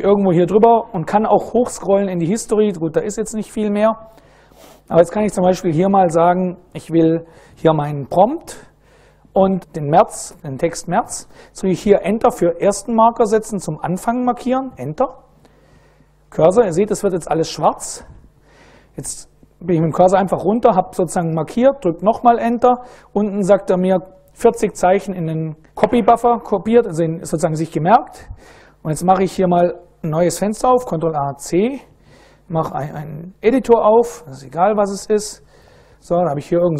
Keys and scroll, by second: 2.4 Down, 3.1 Down, 4.3 Down, 4.5 Up, 4.8 Up, 6.0 Left, 6.3 Left, 6.5 Left, 13.5 Return, 15.5 Down, 16.5 Down, 17.0 Down, 23.1 Return, 30.0 ctrl+a, 31.0 ctrl+c, 32.0-33.2 typing, 33.2 Return, 34.0 Return, 35.0 ctrl+x, 35.0-36.5 typing.